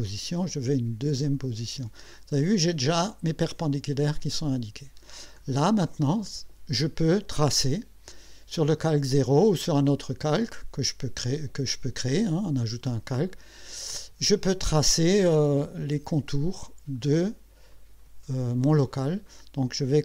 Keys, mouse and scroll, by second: 1.2 click, 5.4-6.2 scroll down 4, 10.5 click, 17.7 click.